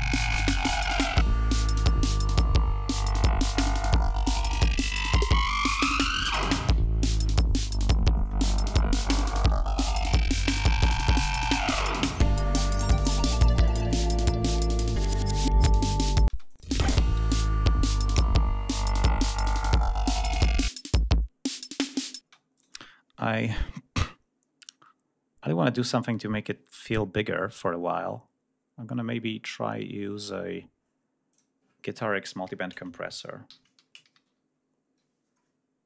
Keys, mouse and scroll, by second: 0.9 ctrl+scroll down 2, 1.9 scroll up 2, 2.6 scroll down 2, 3.1-3.4 ctrl+scroll up 2, 3.7 ctrl+scroll down 2, 4.7 g, 5.1-5.8 ctrl+scroll up 2, 5.8 click, 6.9 ctrl+scroll down 1, 7.3 ctrl+scroll up 1, 10.0-10.4 scroll down 1, 10.6 scroll up 1, 11.5 scroll down 2, 13.2-13.6 scroll up 2, 15.4 ctrl+scroll down 2, 16.2 space, 16.4 click, 16.8-17.1 scroll up 2, 17.7-18.0 scroll up 2, 18.6 click, 19.7 click, 20.6 click, 22.2 space, 22.5 click, 31.3 click, 33.4 shift+g, 33.7 shift+x, 34.0 shift+m, 34.2 shift+u.